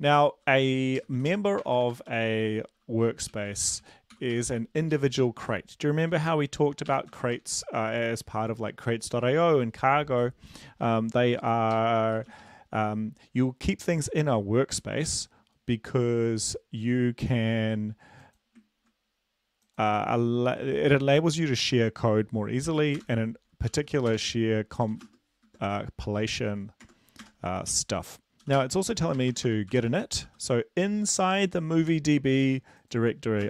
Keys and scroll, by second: 0.0-8.2 typing, 5.2 Right, 12.1-13.0 typing, 13.5 Down, 13.5 Right, 16.0 ctrl+s, 21.4 ctrl+`, 23.1-25.5 typing, 24.6 Return, 26.0 Tab, 26.9 typing, 27.3 Tab, 27.7 Return, 27.9 ctrl+l, 28.3-30.4 typing.